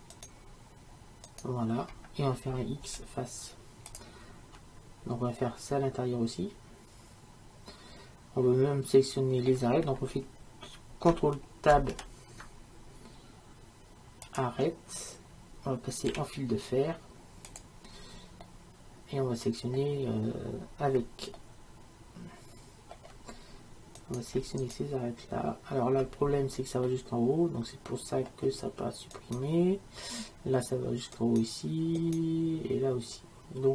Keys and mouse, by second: 2.9 x, 5.5-7.4 middle drag, 11.7 ctrl+Tab, 16.1 z, 18.5-19.8 middle drag, 21.4-24.0 middle drag, 24.0-26.9 right drag, 26.9-29.2 middle drag, 29.2-31.2 right drag.